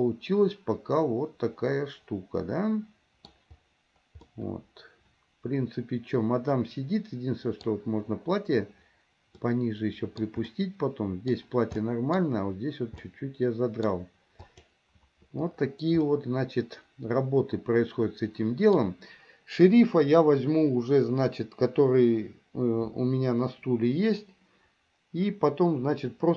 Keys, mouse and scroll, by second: 4.5-7.7 middle drag, 9.5-10.4 middle drag, 10.7-11.5 middle drag, 12.0-12.4 middle drag, 13.2-14.1 middle drag, 16.3-18.9 middle drag.